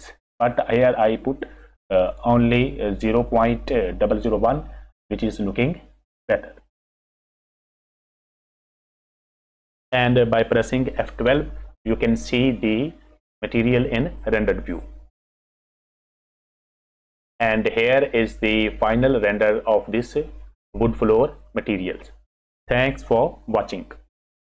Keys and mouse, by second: 2.1 click, 7.7 click, 9.2 F6, 11.8 F12.